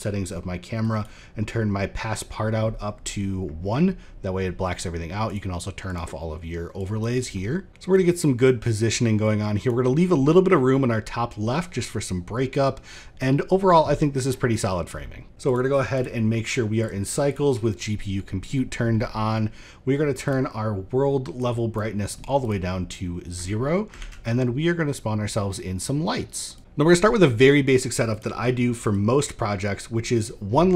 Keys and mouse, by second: 0.4 click, 4.8 click, 5.4 click, 6.4 click, 7.6 ctrl+middle click, 7.9-9.2 drag, 15.3 ctrl+s, 15.3-15.6 drag, 16.4-16.9 drag, 21.0 click, 22.5 middle drag, 23.2 middle click, 23.5 shift+a, 27.6 click, 28.6-29.8 drag.